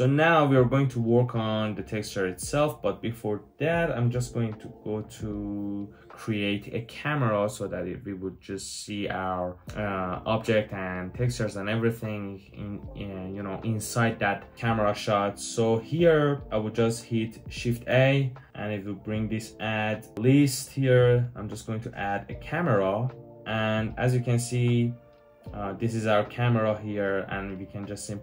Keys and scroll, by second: 17.7 shift+a.